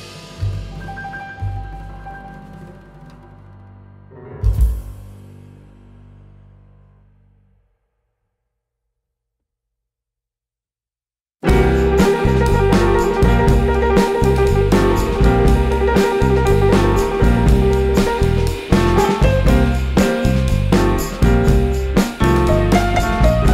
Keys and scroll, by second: 5.9 super+z, 6.6 super+z, 7.4 super+z, 8.3 super+z, 8.6 super+z, 9.6 super+z, 12.6 super+z, 13.3 super+z, 15.0 super+x, 15.5 super+z, 17.6 super+x, 19.4 super+z, 21.9 super+x, 23.0 super+x, 23.4 super+x.